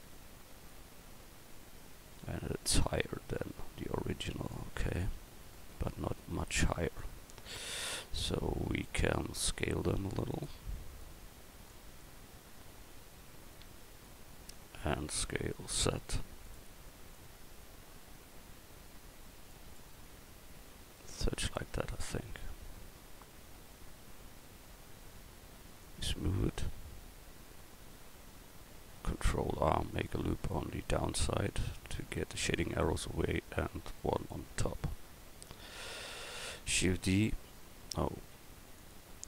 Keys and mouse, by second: 0.6 middle click, 1.8 middle click, 3.9 middle click, 9.4 s, 12.0 middle click, 12.3 middle click, 12.8 middle click, 13.1 middle click, 15.2 s, 20.3 middle click, 20.5 middle click, 27.8 Tab, 29.6 ctrl+r, 32.1 ctrl+r, 34.6 Tab, 36.6 shift+d, 38.3 x.